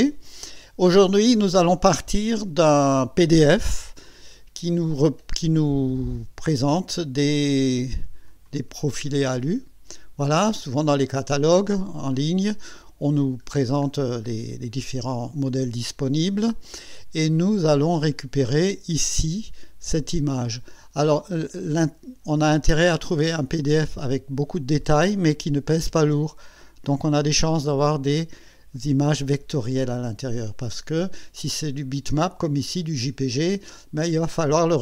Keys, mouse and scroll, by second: 6.5 click, 8.3 click, 9.0-9.6 scroll down 1, 10.0 scroll up 1, 13.5-13.8 scroll down 1, 14.3 scroll up 1, 21.7 click.